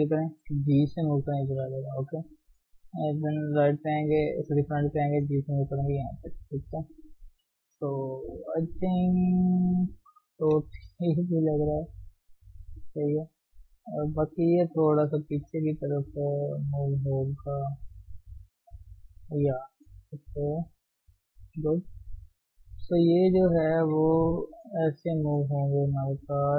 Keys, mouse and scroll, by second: 0.4 g, 1.2 shift+z, 1.4-2.5 middle drag, 2.5 KP_1, 3.6 g, 5.6 shift+z, 6.6 shift+z, 6.7 shift+scroll down 2, 7.0-10.0 middle drag, 10.6 KP_3, 11.4 shift+z, 11.5-12.5 scroll up 3, 12.5 shift+z, 13.6 shift+middle click, 14.6 click, 15.3 g, 16.9 click, 17.1 g, 17.9 middle click, 18.8 g, 19.4 click, 19.7 g, 20.1 scroll down 1, 20.2 middle click, 20.9-21.4 scroll down 3, 21.4 KP_1, 22.0-22.3 scroll up 1, 22.3 click, 22.6 shift+z, 23.1 shift+middle click, 23.4 scroll up 1, 23.7 shift+z, 24.5 g, 25.5 click, 25.8 g.